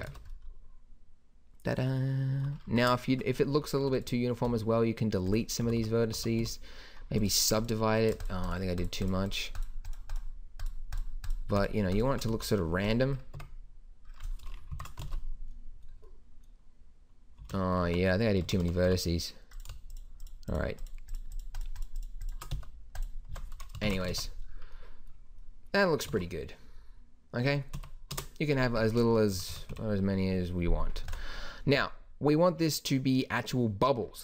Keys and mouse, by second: 0.3 alt+a, 2.7 Tab, 3.8 a, 4.5 x, 5.7 a, 5.8 a, 6.1 a, 6.4 w, 12.3 x, 13.4 Tab, 14.7 shift+Left, 15.0 alt+a, 17.4 Escape, 17.9 Tab, 18.5 a, 18.6 a, 18.9 a, 19.5-20.6 middle drag, 22.5 x, 23.3 Tab, 23.8 shift+Left, 24.1 alt+a, 26.1 alt+a, 27.7 Right, 28.1 KP_0, 29.3 Right, 29.5 Right, 29.7 Left, 31.0 ctrl+s.